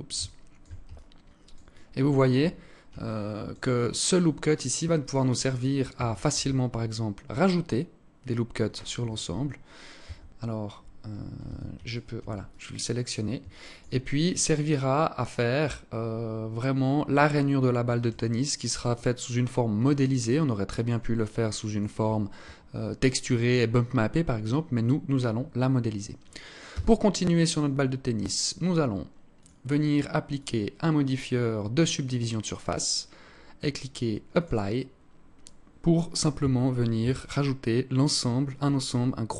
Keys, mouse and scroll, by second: 0.3 alt+click, 1.1 alt+click, 1.9-2.5 scroll up 5, 2.5 alt+click, 3.1 alt+click, 5.7 ctrl+r, 9.5 Tab, 10.9 Tab, 11.3 alt+right click, 11.9 alt+click, 12.9 alt+shift+click, 13.5 scroll down 1, 13.6 scroll up 2, 17.8 alt+click, 20.6 alt+click, 26.1 Tab, 28.8 click, 29.7 click, 33.7 click, 35.8 Tab, 36.4 a, 39.1 alt+right click.